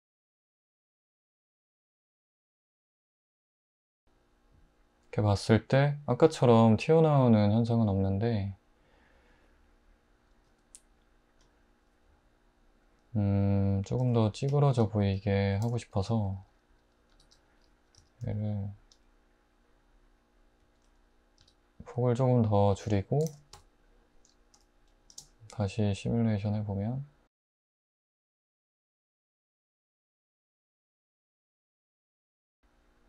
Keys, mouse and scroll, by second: 3.4 space, 14.0 alt+h, 15.0 click, 15.6 alt+z, 17.2 Tab, 18.0 typing, 21.4 Tab, 23.3 alt+z, 24.6 h, 25.1 space, 32.6 space.